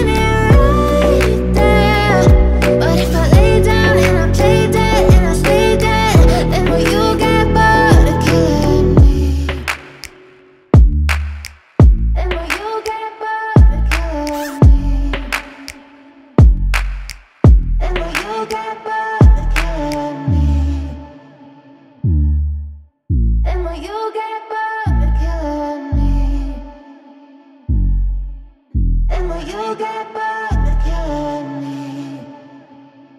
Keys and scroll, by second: 1.8 Escape, 3.0 F3, 5.0 F2, 7.2 F3, 10.9 ctrl+g, 11.4 F2, 13.8 e, 14.2 F3, 15.2 Escape, 15.5 F2, 16.4 Escape, 20.0 space, 24.8 F3, 29.8 shift+Page_Up, 30.8 Escape.